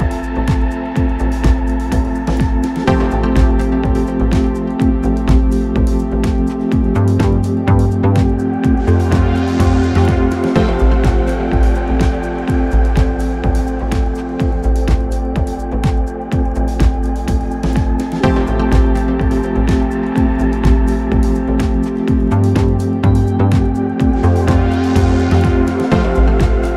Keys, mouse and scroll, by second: 2.0-3.7 drag, 16.2-18.2 drag, 24.7 s.